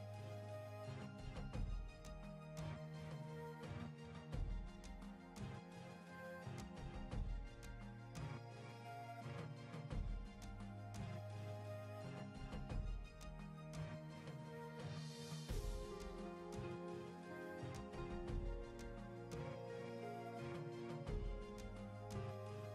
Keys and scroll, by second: 0.9 w, 1.6 w, 2.1 w.